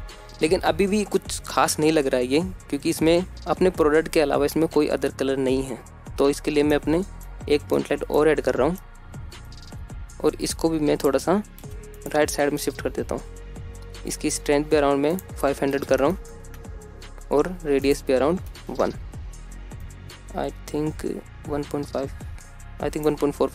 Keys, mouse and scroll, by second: 0.9-2.3 drag, 2.3 scroll down 1, 3.2-3.7 scroll down 1, 8.0 middle click, 8.1 scroll down 2, 8.2 middle drag, 8.5-9.3 middle drag, 8.5-9.3 scroll up 1, 9.5-11.1 typing, 10.4 middle click, 11.6 click, 11.8 middle click, 12.2 middle click, 12.6 g, 13.4-13.9 drag, 13.5 middle click, 14.9 KP_0, 16.8-20.9 drag, 17.8 KP_0.